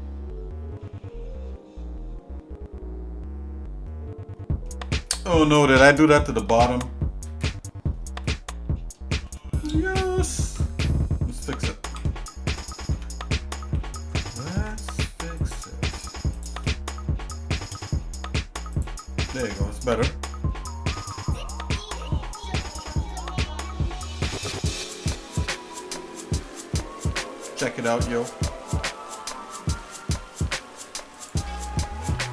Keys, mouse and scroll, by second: 5.1 middle click, 7.4 KP_Divide, 8.2-9.3 shift+middle drag, 9.8 scroll up 2, 10.4 ctrl+Tab, 12.5 click, 12.9 Tab, 13.7 ctrl+`, 14.5 ctrl+Tab, 15.9 click, 16.3 shift+click, 17.7 x, 19.2 shift+middle click, 21.1 KP_Divide, 22.0 middle click, 22.7 Tab, 23.3-24.3 shift+middle drag, 24.6 middle click, 25.1 shift+middle click, 25.6 middle click, 26.2 shift+middle click, 26.7 middle click, 27.3 shift+middle click, 28.1 middle click, 28.7 shift+middle click, 29.3 shift+middle click, 30.3 scroll up 2, 31.1 click, 32.1 click.